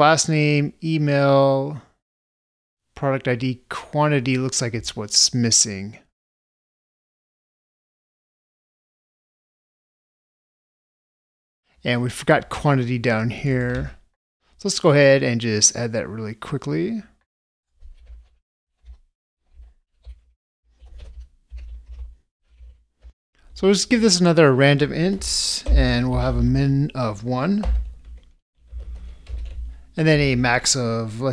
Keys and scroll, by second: 25.8 ctrl+space.